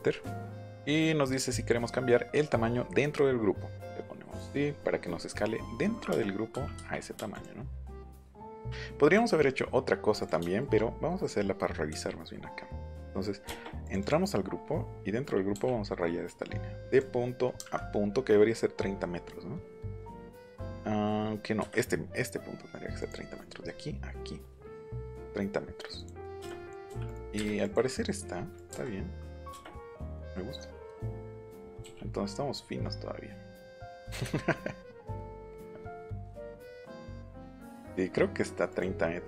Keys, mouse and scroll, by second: 4.3 middle click, 6.7 Escape, 7.1 space, 7.3 click, 8.5 m, 9.1 click, 10.2 click, 11.9 l, 13.4 space, 13.8 click, 14.0 click, 16.9 click, 21.3 middle click, 21.9 middle click, 23.0 click, 25.9 click, 26.4 click, 27.0 click, 27.6 click, 28.5 click, 29.5 space, 30.1 ctrl+z, 31.0 ctrl+z, 34.0 click, 38.6 click.